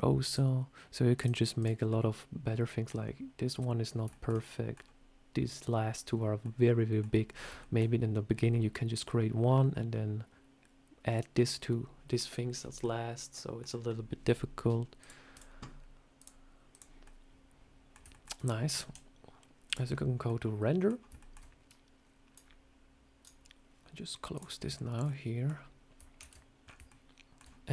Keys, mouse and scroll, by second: 0.1 click, 1.5 click, 1.8 middle click, 4.0 shift+middle click, 4.3 middle click, 4.6 scroll down 1, 6.3 middle click, 7.2 scroll down 2, 7.5 shift+middle click, 12.4 scroll down 2, 12.7 middle click, 13.5 scroll down 1, 13.7 scroll up 2, 14.9 click, 15.2 click, 16.0 click, 16.9 middle click, 18.0 shift+middle click, 18.6 z, 20.0 scroll down 1, 20.1 middle click, 21.1 middle click, 24.6 shift+middle click, 24.9 middle click, 26.1 shift+c, 26.5 scroll up 5, 26.7 shift+middle click.